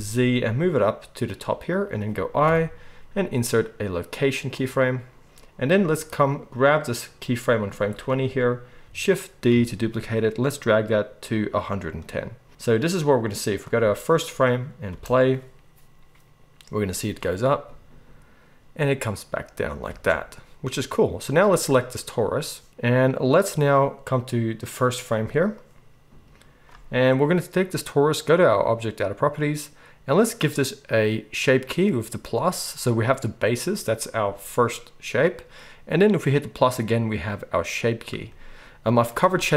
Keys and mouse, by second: 1.8-6.1 middle drag, 4.6 i, 6.1-11.7 drag, 9.5 shift+d, 11.7-12.7 middle drag, 12.7-20.9 drag, 14.9 space, 19.9 space, 20.9-24.6 middle drag, 24.6-29.2 drag, 29.2-32.2 middle drag, 32.2-39.5 drag.